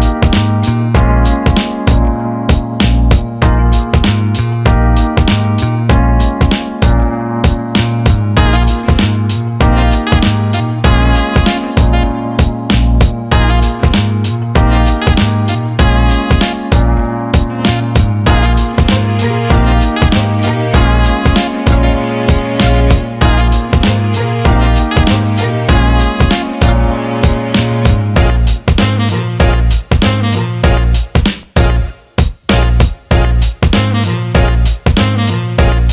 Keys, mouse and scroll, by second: 1.1 alt+middle click, 2.1 Tab, 4.0-5.3 drag, 5.5 alt+middle click, 6.3 alt+middle click, 6.6 click, 8.5 click, 10.0-12.0 drag, 15.2-16.4 drag, 16.8 alt+middle click, 17.6 alt+middle click, 19.2 click, 20.5-23.5 drag, 24.4 Tab, 28.8 click, 31.4-34.5 drag, 35.1 click.